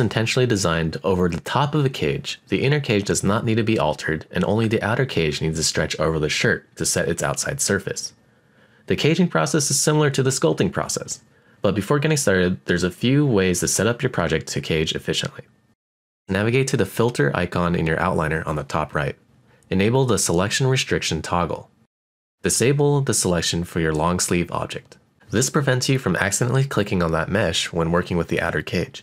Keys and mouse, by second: 1.3-2.3 middle drag, 3.3 middle click, 6.1-9.2 middle drag, 10.9-12.0 middle drag, 17.4 click, 18.8-23.1 drag, 24.8 click, 25.9 click, 26.1 click, 26.7 click, 27.3-29.0 middle drag.